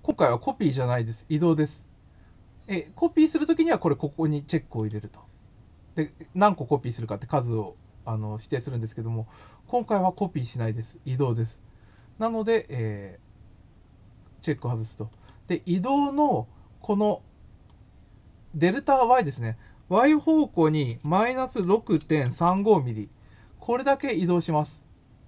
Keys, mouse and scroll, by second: 4.8 click, 10.0 click, 15.1 click, 17.6-18.7 drag, 24.3 click.